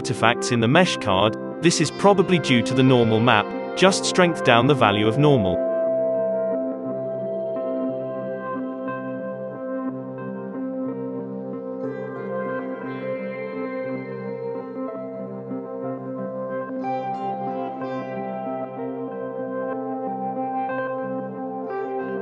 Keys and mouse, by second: 0.7 click, 0.9 alt+a, 2.0 n, 2.3-3.3 middle drag, 2.3 alt+a, 3.3 alt+a, 3.3 click, 3.6 middle click, 4.6 z, 5.3-6.6 right drag, 6.6 middle click, 6.6 KP_5, 6.8-8.7 shift+drag, 7.8 ctrl+z, 9.2 ctrl+z, 9.2 click, 9.2 shift+d, 9.9 g, 10.6-12.0 drag, 12.4 click, 13.2 middle click, 13.3 alt+a, 13.6 click, 13.8-15.5 typing, 15.2 Tab, 15.4 click, 16.1 Tab, 16.6-17.8 middle drag, 17.8-20.6 drag, 19.2 z, 19.8 ctrl+l, 20.1 Up, 20.6 Up, 20.8 alt+a, 21.0-22.2 middle drag.